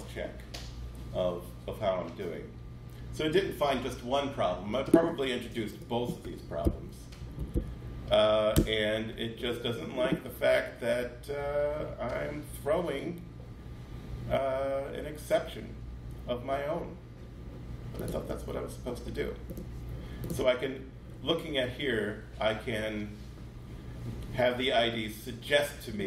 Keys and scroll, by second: 6.4 Right, 7.0 Down, 7.2 Down, 7.3 Down, 8.3 Return.